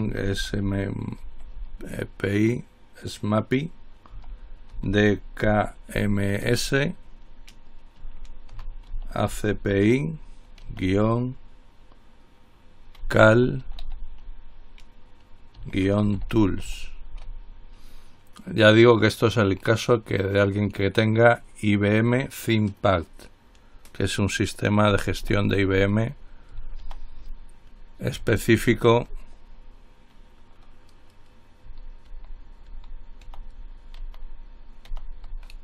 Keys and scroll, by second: 0.0-1.8 typing, 4.1-6.7 typing, 8.5-10.8 typing, 13.0-14.5 typing, 15.6-17.8 typing, 25.5 ctrl+h, 27.1 ctrl+z, 28.8 ctrl+x, 32.4 ctrl+z, 32.9 ctrl+z, 33.4 ctrl+z, 34.2 ctrl+z, 35.1 ctrl+z.